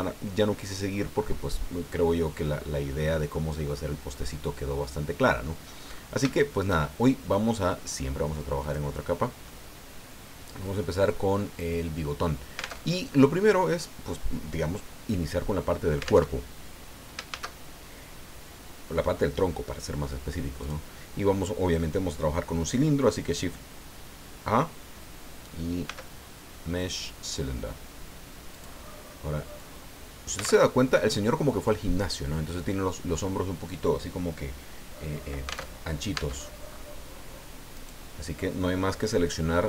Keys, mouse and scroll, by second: 3.3-5.6 middle drag, 5.8-6.2 scroll up 1, 6.3 shift+middle click, 8.6 click, 9.4-10.8 middle drag, 10.8-12.2 drag, 12.8 alt+Tab, 16.3 alt+Tab, 17.3 shift+a, 20.6 click, 25.9 s, 28.5 click, 29.6-30.6 drag, 30.6 alt+Tab, 35.7 alt+Tab, 36.7 Tab, 36.7 scroll up 2, 37.7 right click, 39.1 middle click.